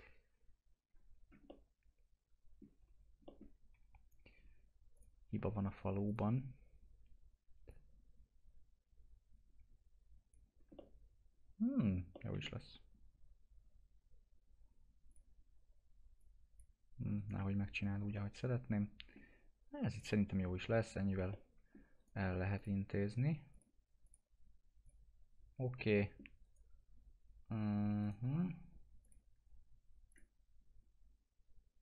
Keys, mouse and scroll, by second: 1.2 scroll down 1, 1.5-2.9 alt+middle drag, 2.9-3.2 scroll up 1, 3.3 alt+middle click, 3.7 2, 4.9 click, 10.5 scroll down 1, 10.8 alt+middle click, 15.1 click, 17.2 right click, 18.1-20.2 alt+middle drag, 19.9 click, 20.2-20.7 scroll up 1, 20.7 1, 21.3 middle click, 22.0 right click, 22.6 click, 25.9 middle click, 26.4 right click, 29.0 click.